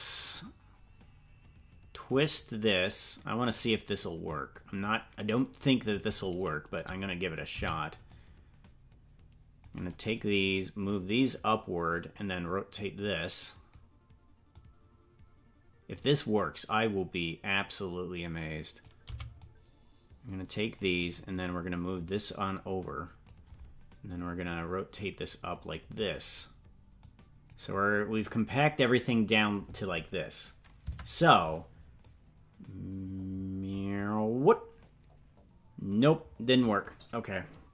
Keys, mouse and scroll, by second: 2.1-3.5 drag, 4.3-5.6 drag, 7.5 c, 10.8-11.9 drag, 12.7 click, 14.5-15.9 drag, 17.5-18.8 drag, 19.0 c, 21.9-23.2 drag, 24.9-26.0 drag, 27.0 click, 28.2 click, 30.9 Tab, 32.0-36.8 drag.